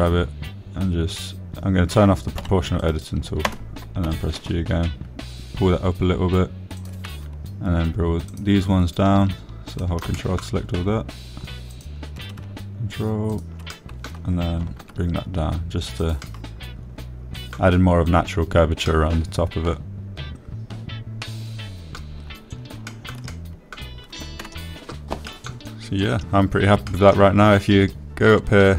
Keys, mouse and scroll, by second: 0.5 middle click, 1.7 g, 2.0 z, 5.1 o, 5.5 click, 6.8 g, 7.1 z, 9.5 click, 12.4 ctrl+click, 12.9 click, 16.5 click, 17.3 g, 17.5 z, 18.7-20.2 drag, 21.6 click, 22.1-24.6 middle drag, 25.6 shift+middle click, 26.0 middle click, 27.1 Tab, 28.0 middle drag.